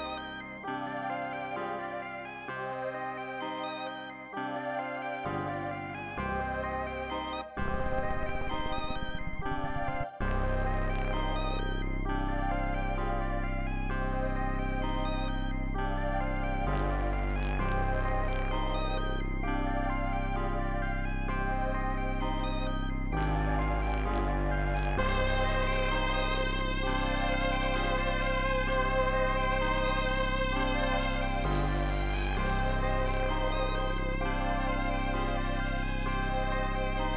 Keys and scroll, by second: 7.4 space, 7.5 space, 9.5 super+Up, 9.7 super+Up, 10.0 space, 10.1 space, 22.2-23.6 typing, 33.9 e, 35.1 super+Down, 35.4 s, 36.2 p, 36.3 super+s.